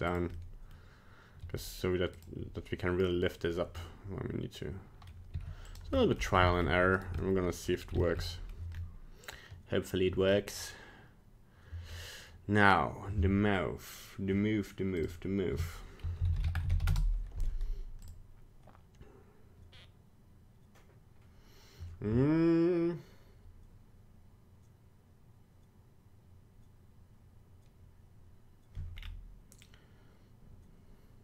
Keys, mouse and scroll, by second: 0.4 middle click, 1.4 g, 3.8 middle click, 5.3 r, 6.0 middle click, 6.5 shift+middle click, 7.0 right click, 7.2 middle click, 7.7 scroll down 2, 8.0 shift+middle click, 8.3 middle click, 8.7-9.2 scroll up 2, 10.5 middle click, 10.6 middle click, 11.9 middle click.